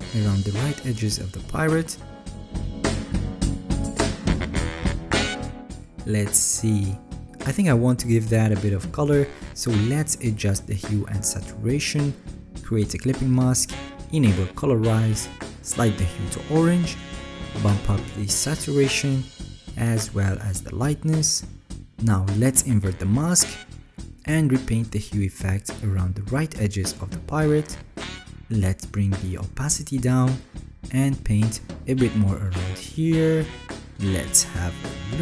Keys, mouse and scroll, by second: 2.6 alt+right click, 4.0 alt+right click, 5.6 alt+scroll, 8.6-9.4 alt+scroll, 9.4 alt+right click, 23.1 ctrl+i, 24.1-24.8 alt+scroll, 25.1 alt+right click, 26.9 alt+right click, 31.3 ctrl+z, 31.3-31.9 alt+scroll.